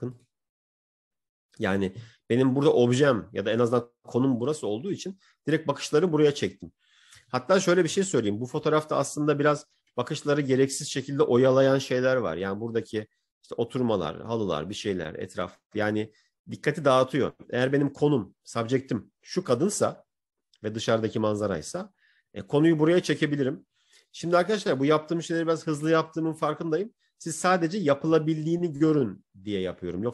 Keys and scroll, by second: 8.4 ctrl++, 9.9 ctrl++.